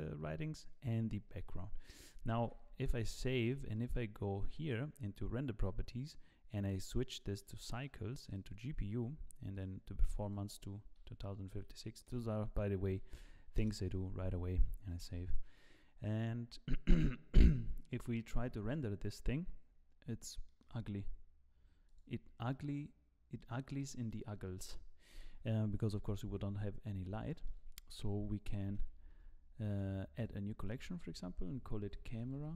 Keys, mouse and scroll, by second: 2.4 ctrl+s, 3.4 click, 3.7 click, 9.1 click, 12.2 click, 12.2 BackSpace, 14.9 ctrl+s, 18.7 z, 20.5 middle click, 20.9-21.9 scroll down 10, 21.9 click, 22.5 middle click, 23.8 middle click, 25.1 KP_0, 26.3 z, 26.8-27.3 scroll up 3, 27.3 shift+middle click, 27.7-28.4 scroll down 2, 28.6 shift+a, 29.7 right click, 30.6 click, 30.8 click.